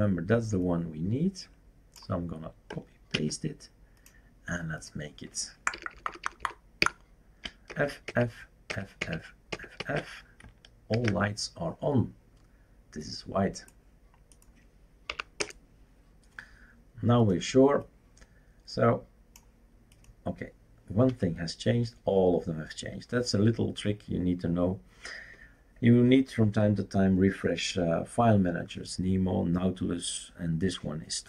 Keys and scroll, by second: 3.1 ctrl+c, 5.7 Delete, 5.9 Delete, 6.0 Delete, 6.2 Delete, 6.4 Delete, 6.8 Delete, 7.7-9.8 typing, 10.9 ctrl+s, 15.1 Up, 15.4 Return, 21.1 F5.